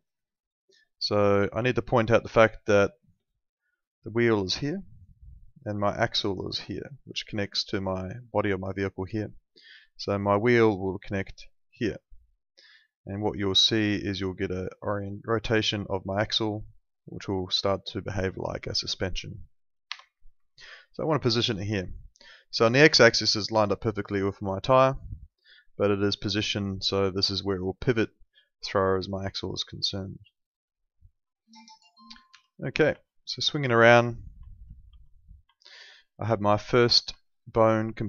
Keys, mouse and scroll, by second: 3.2 ctrl+2, 19.8 Escape, 30.8 middle click, 32.3 p, 33.0 alt+middle click, 34.4 alt+middle click, 34.9 F3, 35.5 alt+middle click, 36.4 alt+middle click, 37.2 alt+middle click.